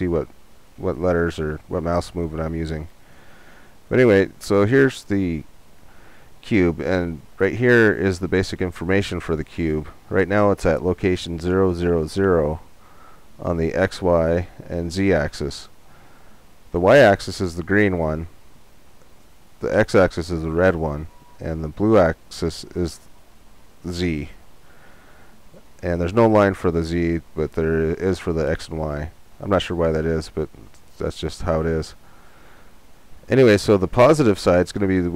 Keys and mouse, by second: 4.3-6.2 drag.